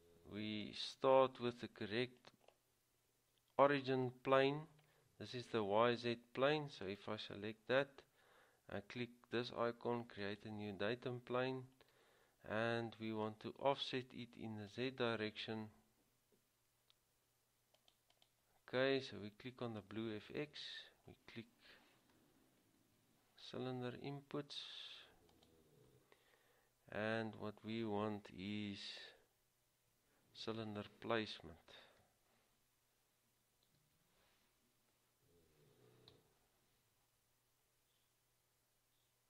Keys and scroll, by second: 23.0 typing, 33.9 typing, 36.3 typing.